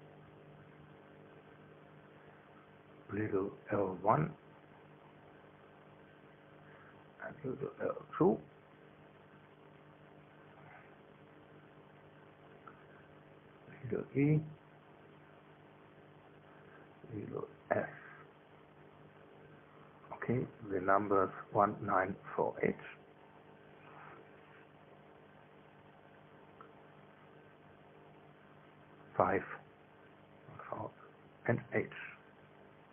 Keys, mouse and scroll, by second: 0.0 right click, 0.9 click, 1.6 e, 2.1 Return, 3.8 right click, 5.4 click, 6.0 l, 6.5 1, 7.2 Return, 8.9 right click, 10.1 click, 11.0 l, 11.4 2, 12.5 Return, 14.4 right click, 15.3 click, 16.0 e, 16.5 Return, 18.2 right click, 19.2 click, 20.0 s, 20.5 Return, 21.9 right click, 22.8 click, 23.0 1, 23.8 Return, 25.1 click, 25.2 right click, 26.0 click, 26.8 9, 27.2 Return, 28.6 click, 29.5 click, 30.4 5, 31.0 Return, 32.1 right click.